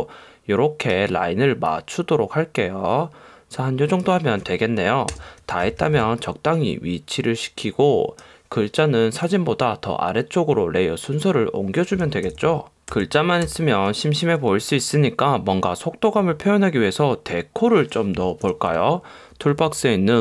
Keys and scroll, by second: 5.2 Return, 5.7 v, 12.4 alt+super+0, 13.0 shift+Left, 14.0 shift+Left, 18.5 super+=.